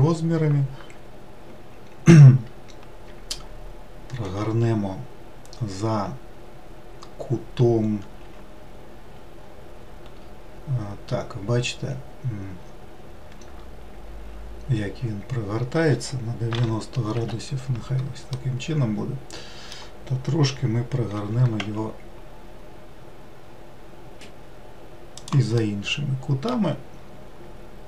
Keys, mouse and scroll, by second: 4.2 r, 18.3-21.2 middle drag, 21.2 r, 25.6-27.8 middle drag.